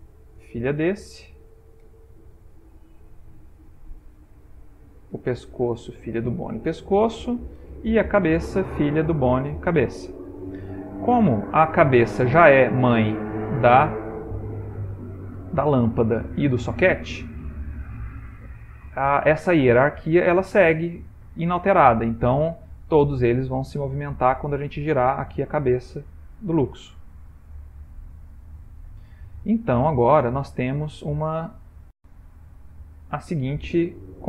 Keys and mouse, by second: 1.0 ctrl+p, 2.5 shift+middle click, 2.6 shift+middle click, 2.7 shift+middle click, 4.0 click, 5.5 shift+click, 6.7 ctrl+p, 8.2 click, 9.0 shift+click, 10.4 ctrl+p, 13.1 ctrl+middle click, 13.4 ctrl+middle click, 14.1 middle click, 15.1 middle click, 15.6 middle click, 15.8 ctrl+middle click, 16.9 middle click, 17.1 middle click, 17.9 middle click, 19.4 ctrl+middle click, 20.3 shift+middle click, 21.3 click, 22.4 click, 24.5 r, 29.8 ctrl+middle click, 30.6 shift+middle click, 31.7 middle click, 32.6 middle click, 32.8 shift+middle click, 33.5 ctrl+middle click, 33.6 ctrl+middle click.